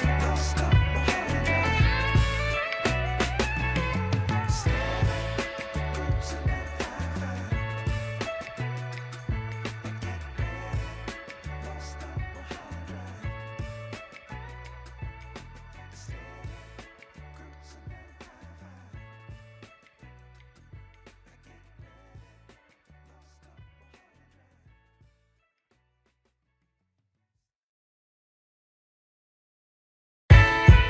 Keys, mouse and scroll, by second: 0.0 middle click, 1.3 shift+middle click, 5.0 click, 6.5 alt+click, 7.9 x, 10.1 ctrl+z, 10.7 click, 11.8 alt+click, 13.4 click, 14.2 alt+click, 14.7 click, 14.9 2, 16.3 ctrl+a, 17.3 Tab, 18.2 ctrl+a, 19.2 Tab, 19.8 click, 20.4 click, 21.6 shift+click, 22.1 middle click, 23.1 middle click, 23.4 middle click, 24.5 middle click, 26.0 shift+click, 26.8 shift+click, 28.9 click, 29.8 ctrl+b.